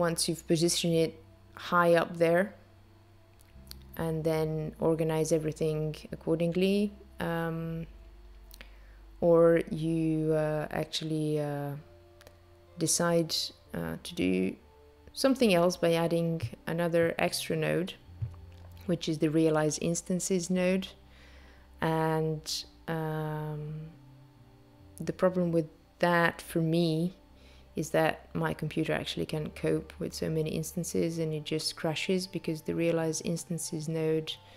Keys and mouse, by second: 2.9 click, 6.2 click, 6.9 click, 8.0 click, 11.7 click, 13.1 BackSpace, 13.2 BackSpace, 17.2 click, 20.6 click, 27.5 space.